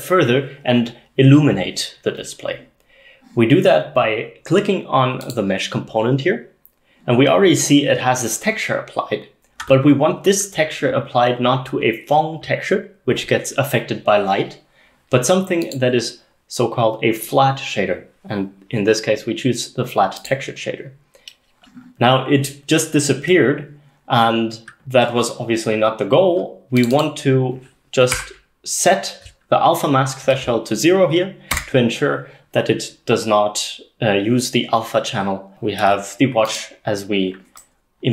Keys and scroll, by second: 28.2 0, 31.6 Return.